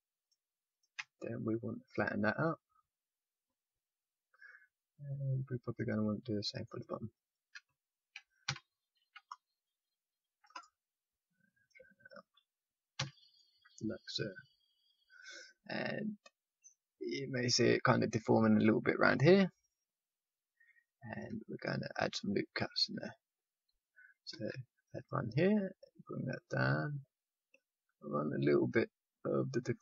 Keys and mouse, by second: 1.9-4.2 drag, 2.3 middle click, 4.2-6.6 middle drag, 6.6-8.9 drag, 8.4 a, 8.9 c, 11.5-13.3 drag, 12.9 a, 13.3 middle click, 22.5 a, 22.9 a, 24.3 ctrl+r.